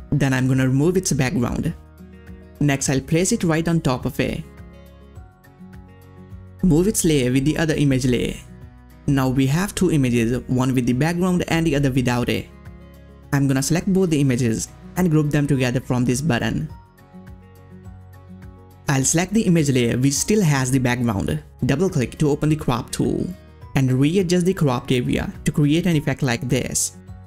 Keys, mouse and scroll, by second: 0.1 click, 0.1 click, 2.1-5.7 drag, 5.7-6.4 scroll down 1, 6.4-9.7 drag, 13.1 shift+click, 13.1-20.1 drag, 21.0 click, 21.0-26.0 drag, 26.4-27.2 drag.